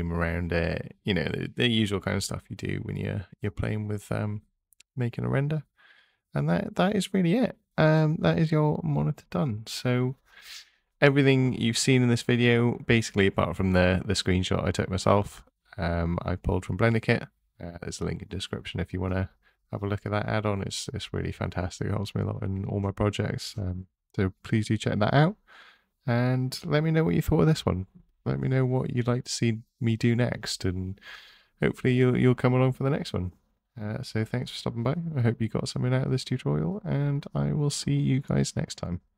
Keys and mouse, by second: 2.5 g, 3.2 x, 4.4 click, 7.3 click, 10.0 Tab, 12.1 e, 14.5 click, 16.4-19.1 drag, 18.6 o, 24.5 click, 30.1 Tab, 31.5 a, 33.0 ctrl+a, 34.9-35.5 drag, 36.0-36.5 drag, 37.7 click, 38.5 ctrl+a.